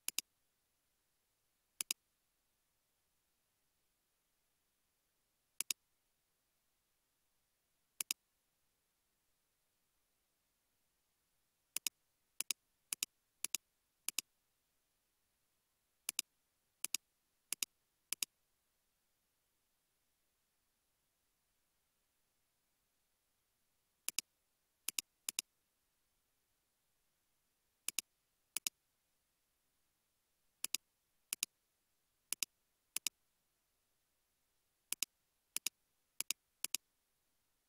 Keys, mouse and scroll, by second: 3.8 typing, 5.9 typing, 13.0 shift+click, 15.1 typing, 18.0-21.4 typing, 18.2 shift+click, 22.4 typing, 25.3 double click, 25.4-27.0 typing, 29.1-29.5 typing, 32.1 typing, 33.5 typing, 36.2 shift+click, 37.1 g.